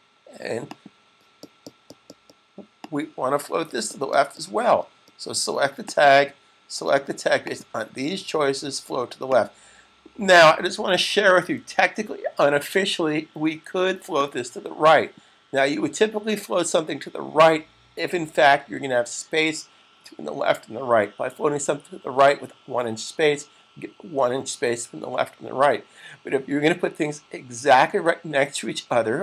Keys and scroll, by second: 10.7 super+s, 11.2 super+s.